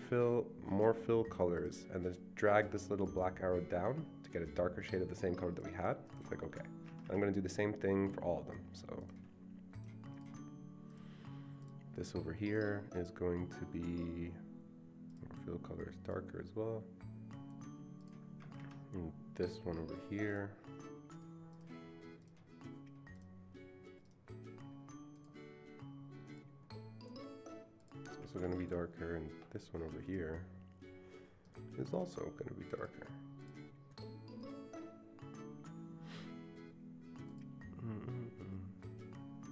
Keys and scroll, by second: 6.9 Escape, 7.0 Escape, 18.5 Escape, 18.6 Escape, 28.2 Escape, 28.5 Escape, 28.6 Escape.